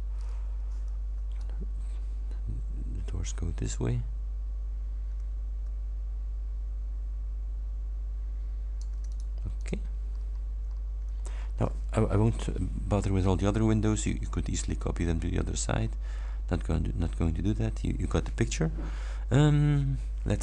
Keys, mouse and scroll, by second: 0.6 h, 1.4-9.0 ctrl+drag, 9.2 ctrl+click, 9.6 ctrl+click, 10.2-11.0 ctrl+scroll down 5, 11.4-11.8 ctrl+scroll up 3, 13.6-14.4 scroll up 4, 15.8-16.5 scroll down 4, 17.1 scroll down 1.